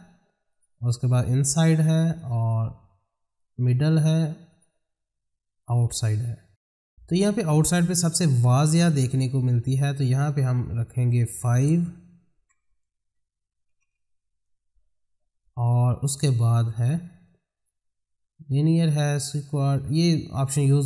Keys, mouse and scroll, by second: 0.0 click, 10.6 click, 17.2-20.1 drag.